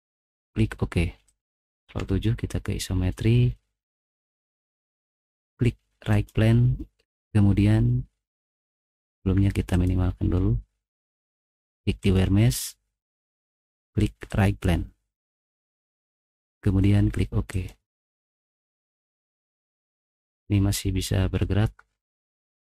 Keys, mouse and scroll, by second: 1.2 click, 1.9 ctrl+7, 6.1 right click, 6.1 ctrl+7, 7.3-8.7 drag, 10.7 click, 12.3 click, 12.8 click, 14.4 click, 17.5 click, 20.3 middle click, 20.8 right click.